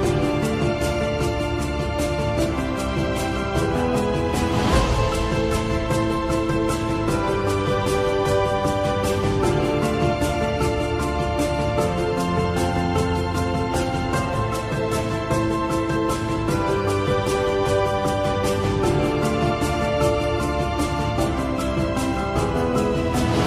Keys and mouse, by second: 3.6 click, 5.1 Tab, 6.8 click, 8.5 KP_1, 10.3 shift+middle click, 11.3 s, 19.3 KP_1, 21.1 g.